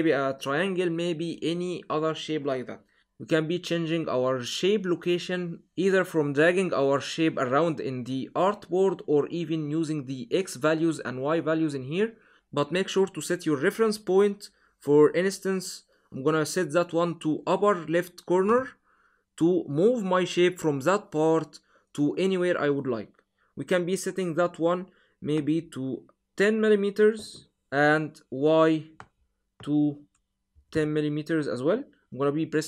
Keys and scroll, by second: 27.5 0, 30.6 0.